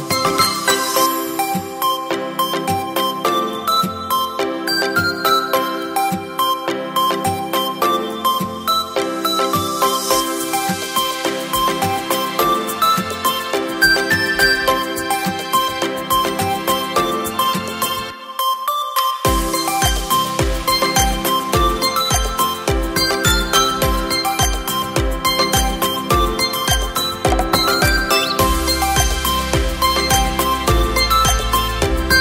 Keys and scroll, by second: 15.5 KP_4, 15.8 KP_8.